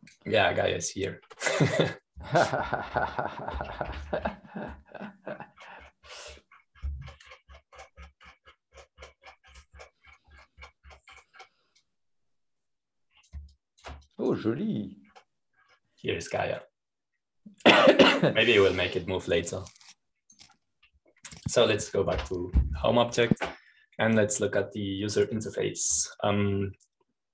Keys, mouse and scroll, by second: 0.0-2.3 drag, 4.2-6.0 typing, 13.4-17.0 drag, 17.6-22.1 drag, 21.9-22.6 typing, 23.7 Home, 25.3-26.6 scroll down 1.